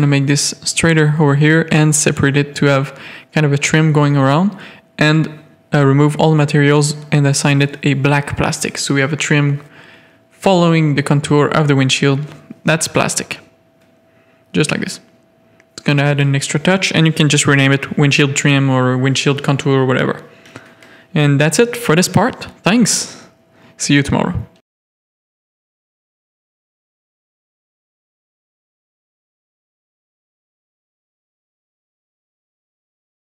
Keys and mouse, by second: 0.4 alt+click, 1.0-1.7 drag, 1.7 Tab, 2.0 alt+a, 2.3 z, 4.7 click, 5.9-7.0 drag, 8.4 alt+a, 8.4 click, 8.8 z, 11.6-12.6 middle drag, 15.2 click, 15.4-19.2 drag, 19.5 alt+a, 20.4-27.3 middle drag, 27.6 middle drag, 28.7-29.2 middle drag, 29.7 middle click, 33.1 KP_3.